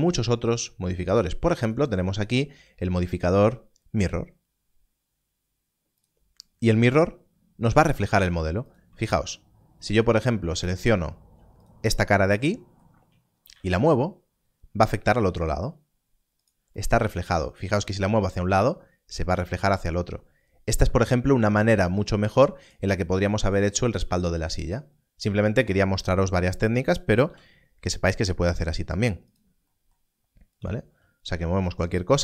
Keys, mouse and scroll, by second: 5.9 scroll down 1, 6.0 click, 8.6 click, 11.2 3, 13.4 3, 13.5 z, 16.3 z, 17.2 g, 22.6 g, 24.1 right click, 24.4 g, 25.6 right click, 29.2 right click, 30.5 click, 31.2 click, 31.7 g.